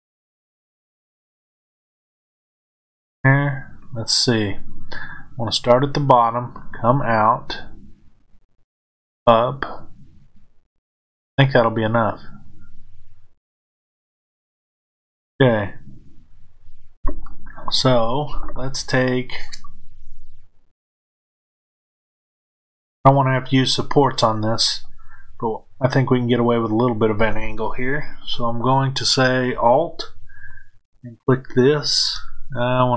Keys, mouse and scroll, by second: 2.1 click, 14.1 click, 19.6-30.5 middle drag, 30.5 alt+click.